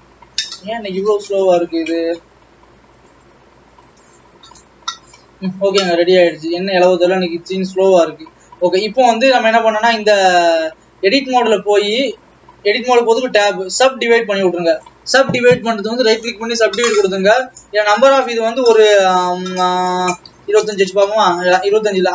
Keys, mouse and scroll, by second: 6.0 click, 6.2-6.7 scroll down 3, 6.7 middle click, 7.0-7.6 scroll up 1, 7.6 click, 10.4 Tab, 12.3-15.3 right drag, 15.3-20.1 drag, 22.0-22.1 drag.